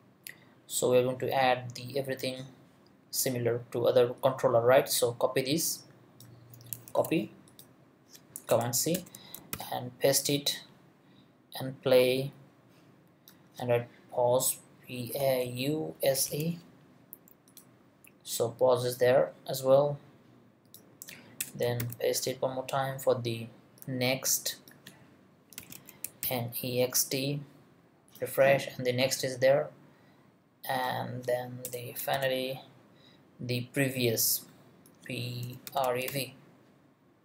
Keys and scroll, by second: 6.9 super+c, 8.5 Return, 9.4 super+Return, 9.5 super+v, 15.0-16.8 typing, 21.4 Return, 21.8 super+v, 25.3-26.7 typing, 31.7 Return, 32.1 super+v, 35.2-36.6 typing.